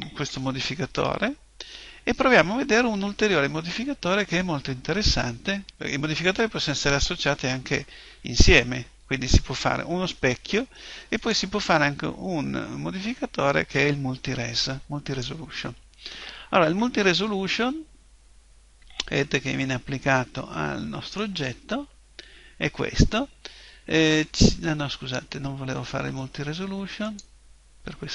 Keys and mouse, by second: 0.1 KP_1, 1.7-3.7 middle drag, 11.2 click, 20.5-27.1 middle drag, 27.1 click.